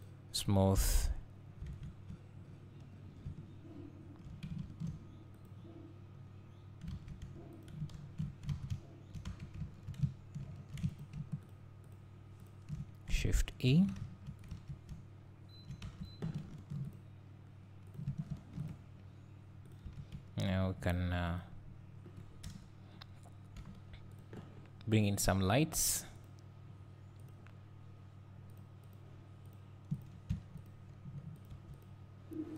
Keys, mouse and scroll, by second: 1.0-5.5 right drag, 1.7 alt+a, 5.5 click, 6.9 alt+a, 7.7 click, 8.0 ctrl+2, 8.5 alt+a, 8.7 `, 9.3 Tab, 9.7 1, 10.6 2, 11.0 alt+click, 11.5 alt+shift+click, 13.7 shift+e, 14.5 click, 14.5 Tab, 14.9 `, 15.9 Tab, 16.5 ctrl+r, 18.1 click, 18.3 ctrl+r, 19.7 click, 19.9 Tab, 21.3 click, 22.5 KP_1, 23.6 g, 25.0 click, 27.2 click, 29.5-32.5 drag.